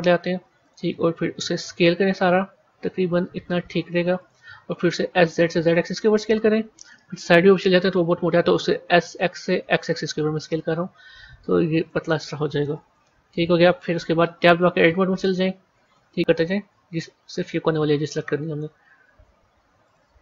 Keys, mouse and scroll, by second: 1.2 s, 5.0 s, 7.5 KP_1, 8.8 s, 12.6 KP_1, 13.7 KP_3, 14.7 Tab, 15.1-16.7 middle drag, 16.7 a, 17.5 shift+click, 18.1-19.7 middle drag, 19.7 shift+click.